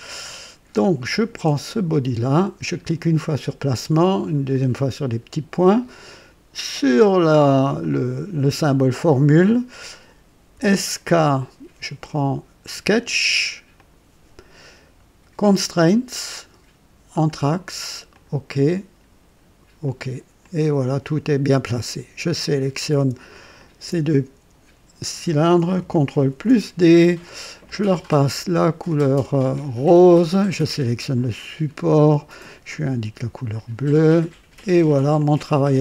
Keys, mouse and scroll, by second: 1.8 click, 3.1 click, 4.4 click, 7.7 click, 10.4-11.2 typing, 13.7 click, 15.4 click, 17.0 click, 18.0 click, 19.7 click, 20.3 click, 21.7 click, 23.5 ctrl+click, 26.2 ctrl+d, 26.2 ctrl+d, 27.5 click, 29.5 click, 30.7 click, 32.6 click, 33.5 click, 34.5 click, 35.1 click, 35.6-35.8 drag.